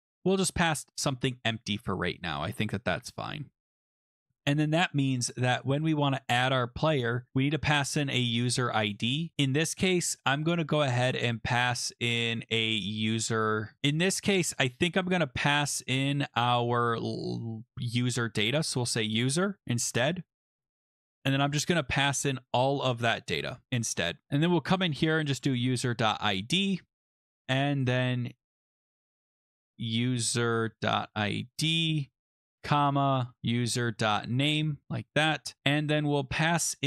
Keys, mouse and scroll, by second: 0.0-1.5 typing, 1.0 click, 2.3 click, 2.9 ,, 3.7 ctrl+s, 4.1 click, 5.5 click, 8.1 click, 8.2 click, 13.0 Right, 13.8 scroll, 14.4-15.7 scroll, 16.5 click, 17.3-17.9 scroll, 18.3-19.3 typing, 19.6-20.7 scroll, 22.5 click, 23.3 BackSpace, 23.8 scroll, 24.2 ctrl+z, 24.4 click, 24.5 click, 25.1-26.5 typing, 27.8 click, 28.2-29.0 typing, 29.7 click, 30.1-36.3 typing, 31.5 Delete, 31.6 Delete, 31.7 Delete, 31.9 Delete, 35.8 click.